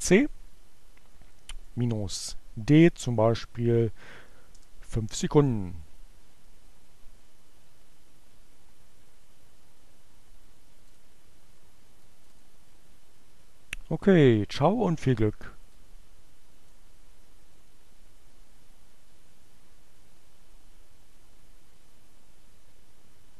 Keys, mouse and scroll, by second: 1.3 space, 1.5 d, 1.8 space, 3.3 5, 4.1 Return, 11.0 click, 12.0 click, 15.8-17.0 drag.